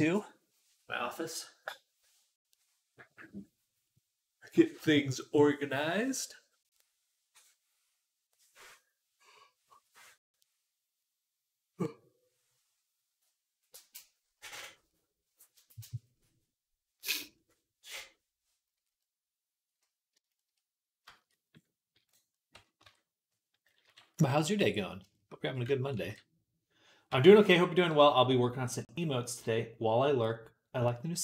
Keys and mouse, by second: 22.7 Tab, 23.7 KP_3, 24.4 z, 25.8 ctrl+r.